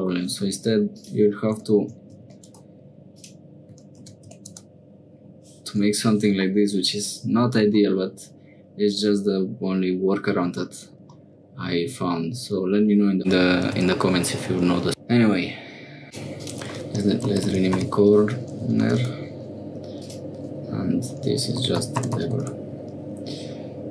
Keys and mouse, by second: 0.9-5.4 drag, 2.2 9, 6.5 middle click, 11.2 middle click, 16.0 click, 16.4-19.5 drag, 20.0-22.9 drag.